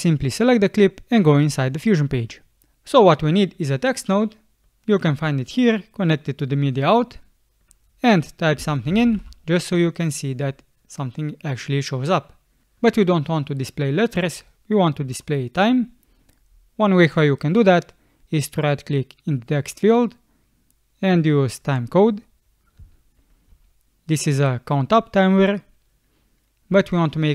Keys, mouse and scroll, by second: 8.3-9.6 typing, 15.1 BackSpace, 22.8 space, 23.5 space, 26.7 space.